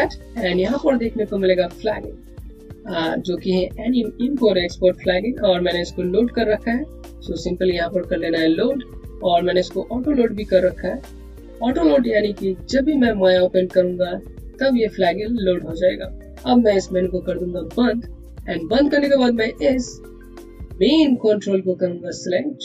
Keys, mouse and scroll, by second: 17.6 click, 21.2 click.